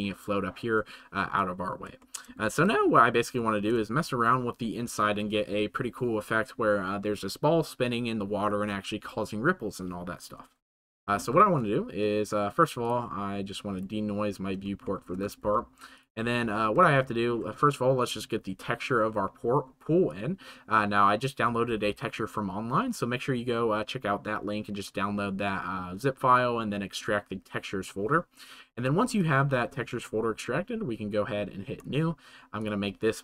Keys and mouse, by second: 2.1 shift+middle click, 4.0 ctrl+s, 11.5 ctrl+s, 15.0 shift+middle click, 15.5-16.7 middle drag, 17.1 shift+middle click, 20.1-21.2 middle drag, 29.2-31.9 middle drag, 32.7-33.2 middle drag.